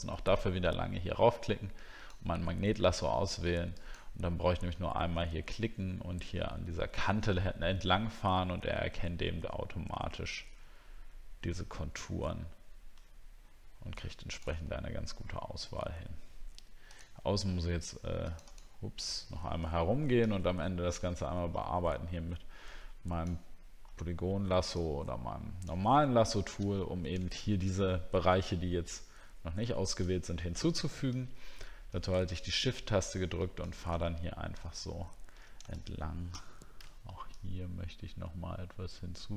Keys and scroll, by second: 34.7 alt+scroll up 1.